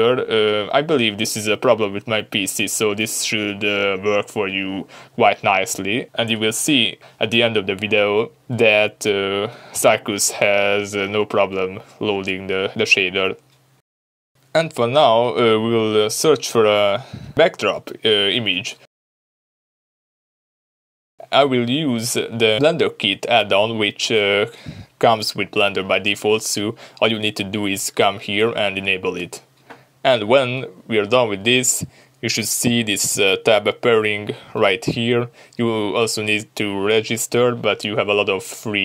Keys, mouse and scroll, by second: 3.3-4.6 middle drag, 3.7-4.6 scroll up 2, 8.5 scroll up 1, 8.6-9.1 middle drag, 9.1-10.6 scroll up 2, 9.2-18.7 middle drag, 11.9-14.0 scroll up 2, 15.5-16.1 scroll down 2, 18.7 click, 19.1 middle click, 19.5 click, 22.7-24.0 shift+middle drag, 23.1-24.0 scroll up 2, 24.0 click, 26.4-38.8 drag, 36.5 n.